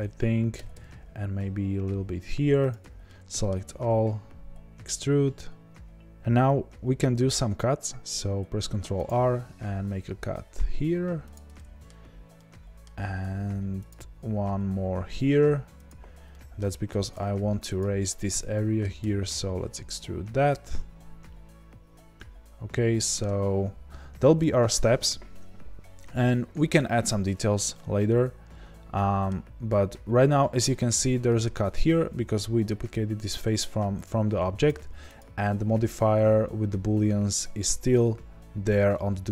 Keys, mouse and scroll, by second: 0.5 g, 3.0-17.1 middle drag, 3.6 e, 8.6 ctrl+r, 13.2 ctrl+r, 16.8 3, 17.1 click, 17.7 click, 18.1-27.2 middle drag, 19.0 e, 27.2 Tab, 27.7-34.0 middle drag, 29.3-30.3 scroll down 1, 30.3 scroll up 1, 33.2-34.0 scroll down 1, 34.0 click, 35.1 click.